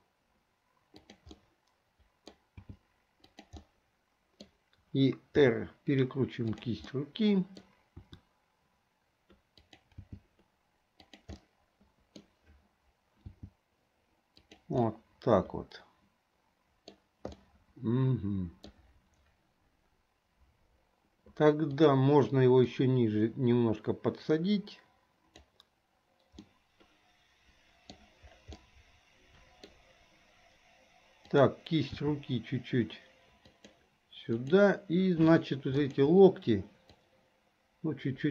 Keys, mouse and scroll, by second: 1.5 middle click, 3.5 g, 3.8 middle click, 5.5 r, 7.0-7.8 middle drag, 8.2 r, 10.7 g, 11.5 middle click, 13.3 g, 14.9 scroll up 1, 15.0-17.1 middle drag, 17.1-17.4 scroll down 1, 17.4-18.9 middle drag, 22.8-25.7 drag, 26.5-28.1 middle drag, 28.7-29.9 middle drag, 31.3 click, 32.6 g, 34.5 click, 35.8 shift+click, 37.0-38.3 drag.